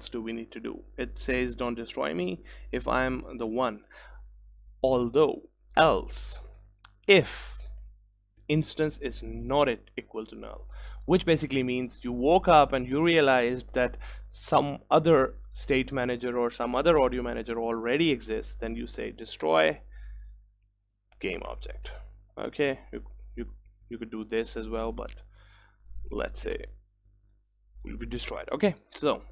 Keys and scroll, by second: 8.2 Return, 19.7 Return, 22.7 Return, 24.7 ctrl+s.